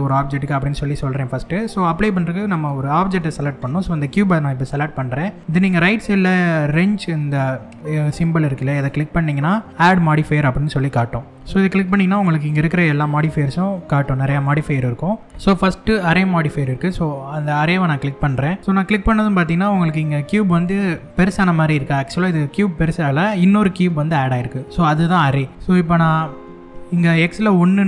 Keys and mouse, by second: 0.0-0.6 middle drag, 3.4 click, 8.3 click, 11.0-11.8 drag, 12.8-18.0 drag, 18.6 middle click.